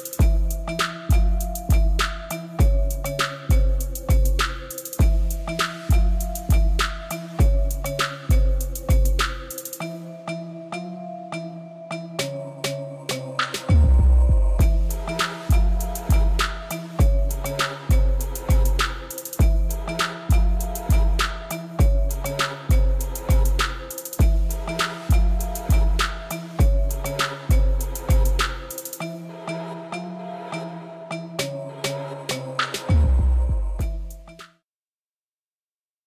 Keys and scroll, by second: 2.0 Tab, 3.6 a, 7.0 Tab, 7.8 alt+a.